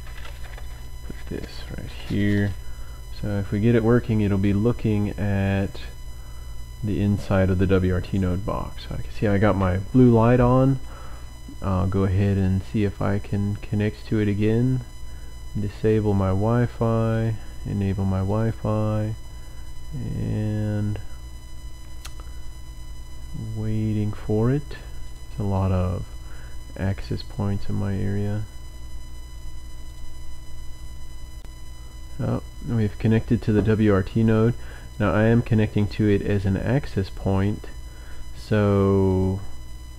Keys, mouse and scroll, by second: 12.3 click, 14.4 click, 16.1 click, 17.1 click, 18.4 click, 25.0 click, 27.0 click, 29.9 click, 31.3 click, 34.3 click, 34.9 click, 35.7 click, 39.1 click.